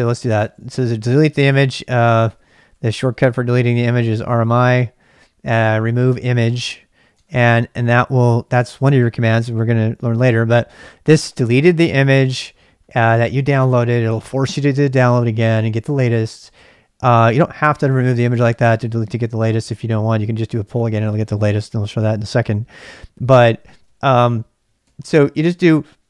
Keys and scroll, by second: 0.0-5.1 typing, 7.1 Return, 23.7 ctrl+[, 23.9 k, 24.8 k.